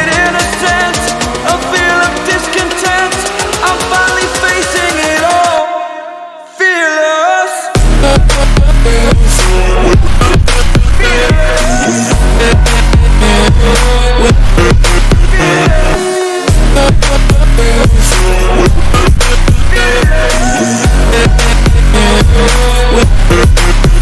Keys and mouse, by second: 0.3 click, 2.1 click, 3.3 ctrl++, 6.9 click, 8.9 click, 11.4 click, 12.8 click, 13.9 click, 15.1 ctrl+z, 15.2 click, 16.5-17.6 drag, 18.3 click, 18.5 click, 19.5 click, 19.7 click, 20.8 ctrl+-.